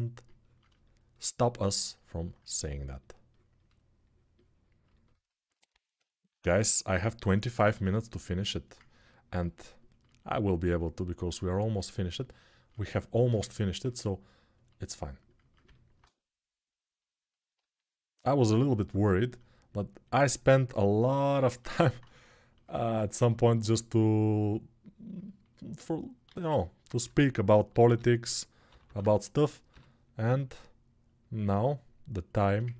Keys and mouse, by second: 26.1 alt+q, 26.8-29.4 typing, 27.4-29.8 middle drag, 29.8-32.7 drag.